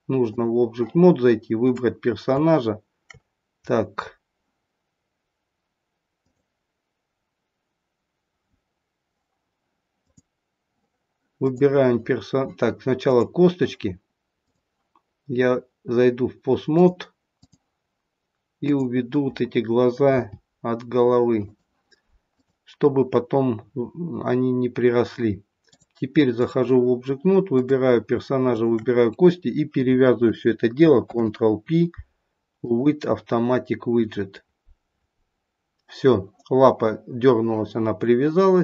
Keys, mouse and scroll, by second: 1.6 click, 3.5-4.6 scroll up 1, 4.6-6.2 scroll up 1, 6.2 click, 10.0 click, 11.4 click, 13.0 click, 14.2 click, 16.7 click, 18.6 click, 20.0 g, 22.3 click, 25.5 click, 27.6 click, 28.5 shift+click, 31.0 ctrl+p.